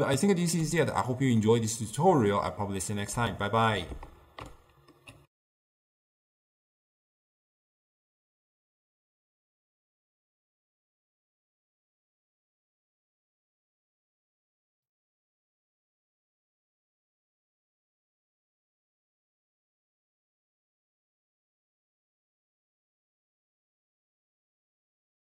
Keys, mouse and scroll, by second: 4.4-5.2 ctrl+alt+shift+q, 5.3 ctrl+alt+shift+w.